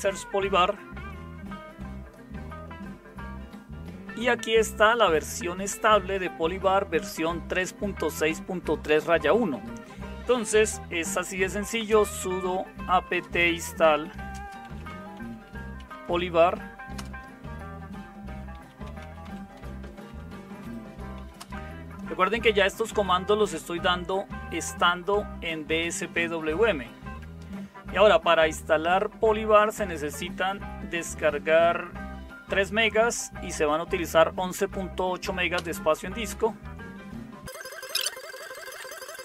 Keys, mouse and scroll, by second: 11.1-16.6 typing, 16.9 Return, 18.7-21.9 typing, 35.5 Return.